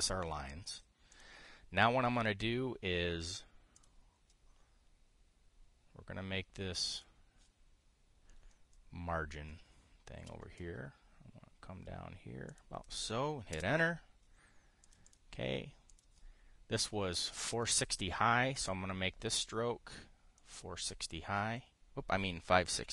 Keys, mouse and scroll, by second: 1.4 click, 1.8 click, 4.4 click, 7.6 click, 14.2 Return, 15.5 click, 16.6 click, 19.2 click, 21.1 click.